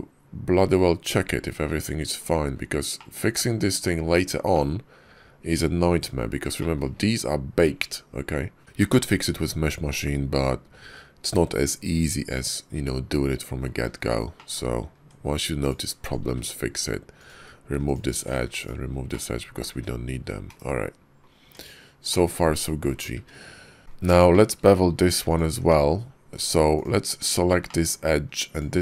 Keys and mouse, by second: 2.8 middle click, 4.4-5.9 middle drag, 6.4 shift+click, 8.6-13.5 middle drag, 14.2 middle click, 14.8 Tab, 15.4 alt+click, 16.1 x, 18.5 x, 18.9 click, 19.7 `, 20.3 /, 21.3 Tab, 21.9 click, 23.0 `, 24.2 shift+drag, 25.4 Tab, 26.6 alt+click, 27.5 shift+click, 28.3 alt+shift+click.